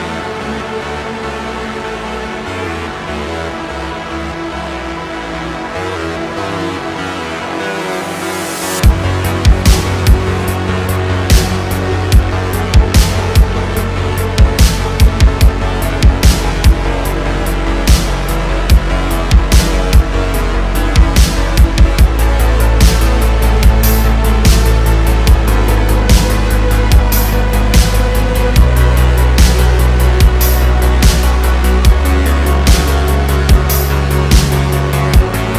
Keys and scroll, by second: 1.2 g, 4.3 g, 6.5 super+z, 6.8 super+z, 7.0 super+z, 7.8 super+z, 9.8 super+z, 13.9 Tab, 18.0 g, 20.9 g, 21.0 z, 21.0 z, 23.1 g, 23.2 z, 23.3 z, 24.7 g, 26.0 g, 30.3 Tab, 34.9 shift+a.